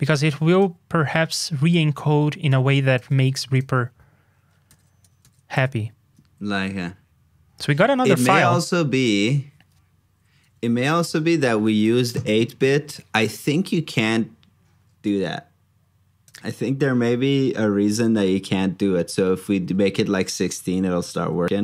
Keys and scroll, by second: 3.2 super+c, 4.6 ctrl+c, 5.2 super+v, 19.7 super+Tab.